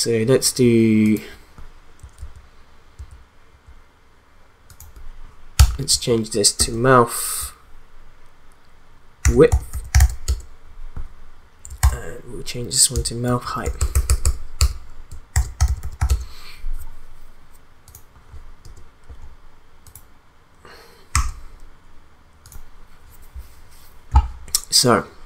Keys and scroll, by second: 2.2 ctrl+z, 5.5 Return, 5.9 Right, 6.6 space, 9.0-10.4 typing, 11.8 ctrl+d, 12.9 Return, 13.3 Right, 13.5 BackSpace, 15.0-16.5 typing, 18.6 Return, 21.1 e.